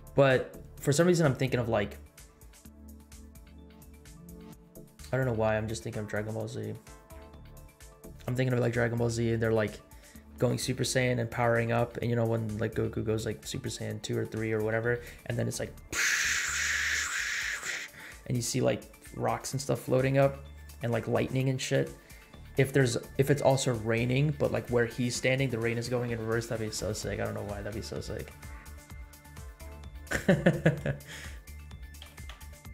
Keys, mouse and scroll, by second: 27.9 space, 30.7 space, 32.0 r.